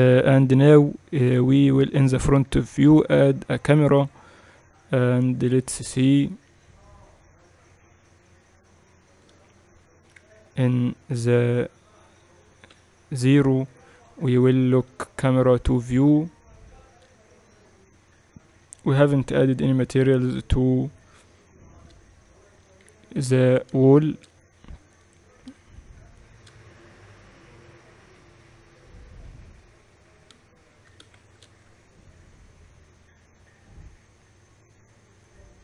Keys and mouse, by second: 0.0-2.1 typing, 3.2 shift+a, 6.4-8.2 drag, 8.4-10.8 drag, 10.8 KP_0, 13.4 n, 14.6-16.4 drag, 14.9 n, 16.4-19.5 middle drag, 19.5-22.2 right drag, 21.0-22.7 drag, 22.7-32.2 middle drag, 29.1 KP_6, 32.2 shift+z.